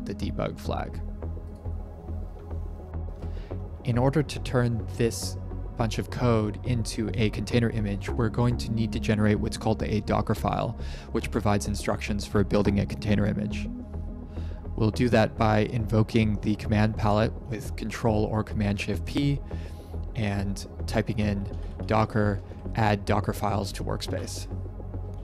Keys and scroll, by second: 2.9 ctrl+Print, 13.9 ctrl+Print, 16.7 ctrl+shift+p, 20.9-22.7 typing, 23.9 Return.